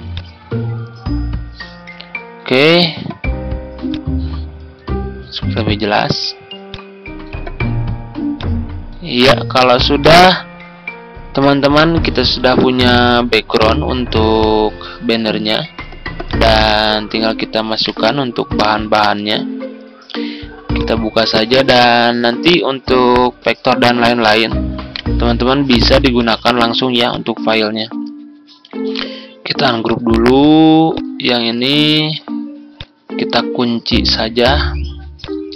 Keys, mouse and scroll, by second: 17.7-18.8 right drag, 20.6 click, 24.8-25.9 right drag, 26.0 click, 28.8 right click, 29.7-31.8 drag, 33.6-34.8 scroll down 1, 35.0-35.5 drag.